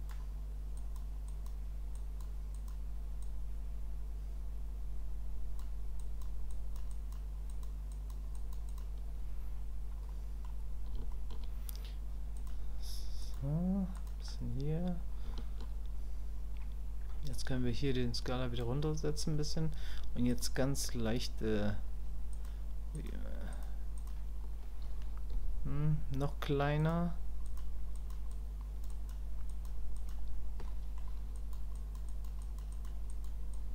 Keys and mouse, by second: 0.8 click, 1.3 click, 2.0 click, 2.5 click, 3.2-5.6 drag, 6.0 click, 6.5 click, 6.9 click, 7.5 click, 7.9 click, 8.3 click, 8.7 click, 10.1 middle click, 11.1 shift+middle click, 12.4 click, 13.2 click, 14.0 click, 15.3 shift+click, 17.3-18.6 drag, 20.3 click, 22.4 click, 23.0 click, 23.5 click, 24.0 click, 27.5 click, 28.0 click, 28.3 click, 28.9 click, 29.5 click, 29.9 click, 30.7 middle click, 31.3 click, 31.7 click, 32.1 click, 32.4 click, 32.7 click, 33.1 click, 33.6 click.